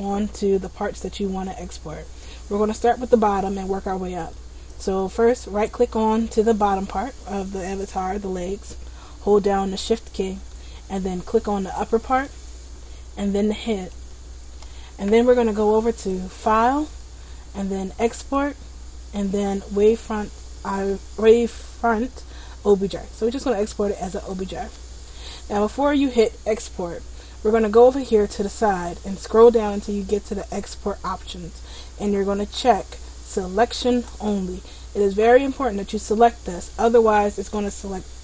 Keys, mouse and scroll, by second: 5.6 right click, 11.4 shift+right click, 13.6 shift+right click, 16.2 click.